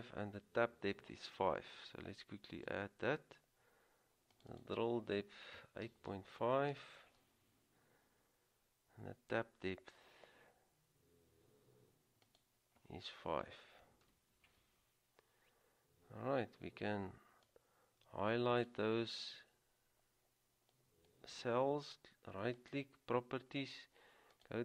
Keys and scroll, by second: 5.5-6.7 typing, 13.6 typing.